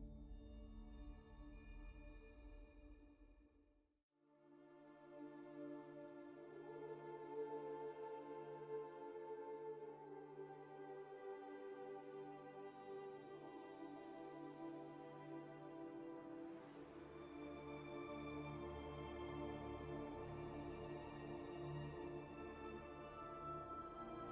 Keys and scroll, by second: 4.8 shift+d, 5.8 shift+v, 7.1 1, 7.4 q, 13.6 2, 14.3 F4, 16.2 `, 16.4 1, 17.4 alt+s, 18.6 space, 19.2 F4, 19.9 F4, 21.0 alt+s, 23.9 space.